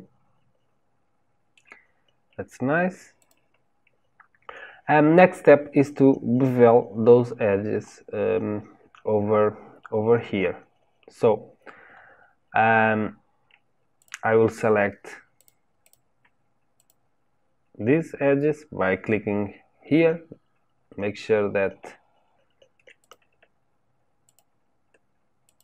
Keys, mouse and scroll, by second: 3.1 click, 13.9 click, 15.3 click, 15.8 click, 16.7 click, 23.0 click, 24.2 shift+click, 25.4 shift+click.